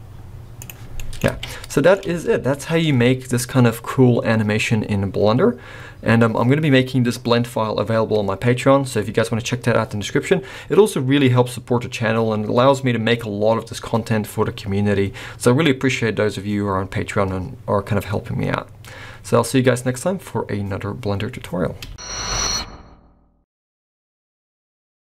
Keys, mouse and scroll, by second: 1.0 middle click, 1.2 alt+a, 1.7 middle click, 2.0 space, 2.3-3.1 scroll up 1, 3.1 scroll up 1.